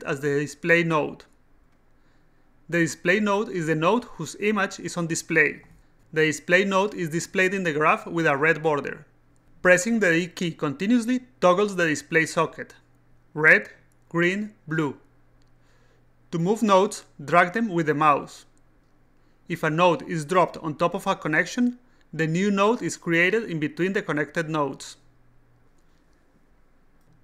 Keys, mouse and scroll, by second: 14.2 d, 15.2 d, 17.1-18.8 drag, 20.6 click, 21.9-23.3 drag, 23.9 click, 24.9 click, 25.4 d, 27.0 click.